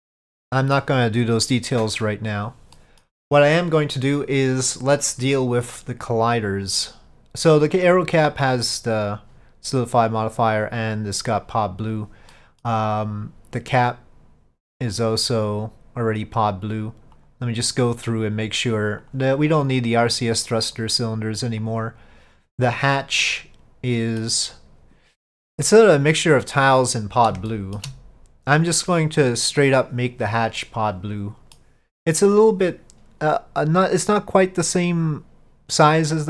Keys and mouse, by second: 0.1-0.8 middle drag, 2.8 middle click, 7.6 click, 8.4 click, 10.3 click, 12.4-12.7 middle drag, 14.7 click, 15.5 click, 17.3 click, 18.1-23.3 drag, 23.3-24.3 middle drag, 27.6 shift+middle drag, 30.7-31.6 middle drag.